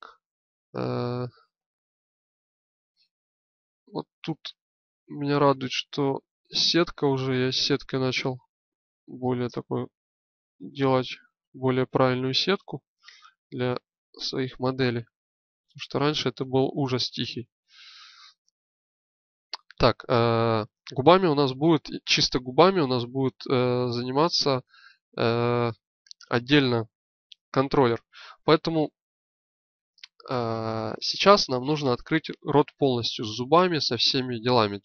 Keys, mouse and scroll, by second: 1.5-3.3 alt+middle drag, 3.8 click, 9.5 middle click, 17.5 l, 23.1 click, 23.3-25.6 middle drag, 33.0-34.8 middle drag.